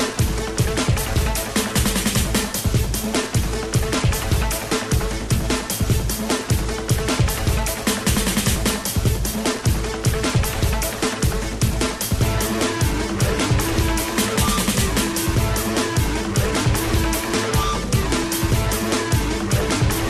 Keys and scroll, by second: 15.4 i.